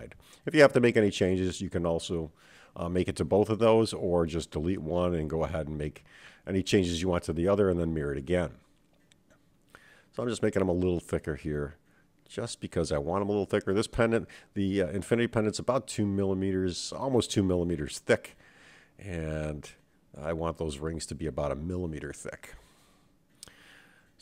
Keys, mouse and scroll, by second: 0.8-2.2 middle drag, 2.5-3.0 scroll down 2, 3.0-3.3 scroll up 2, 3.4-4.2 middle drag, 4.7 click, 5.9 s, 7.5-8.3 middle drag, 8.6-9.1 scroll down 3, 9.6-10.2 scroll up 1, 10.2 click, 11.0 s, 13.1-13.9 middle drag, 14.3 click, 14.9-16.1 scroll up 2, 16.2-16.7 scroll up 2, 16.7 scroll down 1, 16.9-18.3 scroll down 2, 18.3 click, 20.2 x, 21.0-21.7 scroll down 3, 21.7-22.7 middle drag, 22.7 scroll up 1, 23.8-24.2 middle drag.